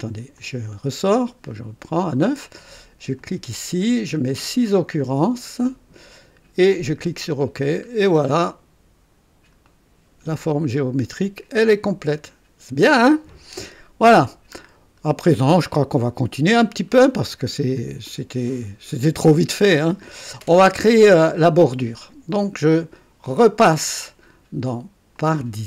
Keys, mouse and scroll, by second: 0.4 click, 3.1 click, 5.7 scroll up 1, 6.7 click, 7.5-8.2 scroll down 1, 8.2-8.8 right drag, 9.2 scroll up 1, 9.6-10.3 right drag, 10.4 click, 12.0 click, 14.7 scroll up 2, 15.2-17.1 drag, 18.0 click, 18.6 right click, 19.7 scroll down 1, 25.2 click.